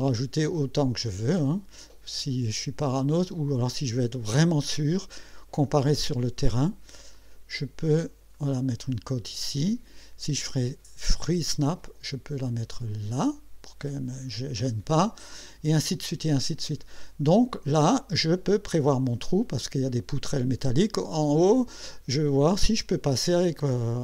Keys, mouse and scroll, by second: 1.8 click, 4.3 click, 7.1 click, 8.3 click, 11.1 click, 12.9 click, 16.2 scroll down 2, 17.0 scroll down 2.